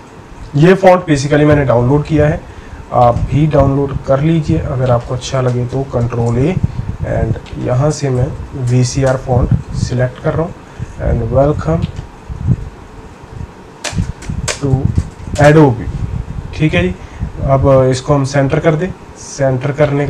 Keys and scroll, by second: 5.7 ctrl+a, 8.4-9.5 typing, 9.8 Return, 10.8 typing, 13.0 Right, 13.1 Right, 14.2-15.4 typing.